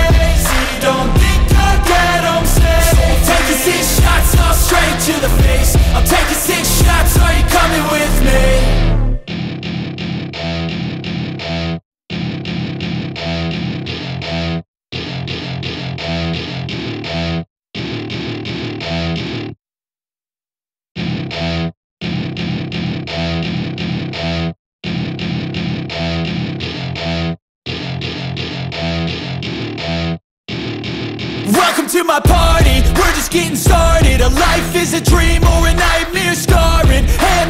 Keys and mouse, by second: 0.2 click, 1.7 g, 3.0 click, 3.5 drag, 4.9 r, 6.0 click, 6.9-8.3 drag, 8.9 click, 9.7-16.4 drag, 17.2 click, 18.4 drag, 19.1 click, 22.7 r, 24.4 click, 25.1 click, 26.2 r, 27.0 click, 28.7-30.1 drag, 30.9 click, 32.4 g.